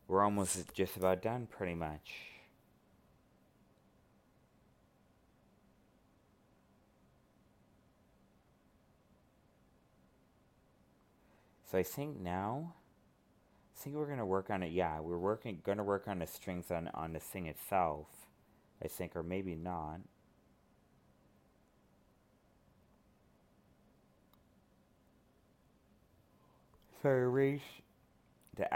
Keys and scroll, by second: 21.0 ctrl+z.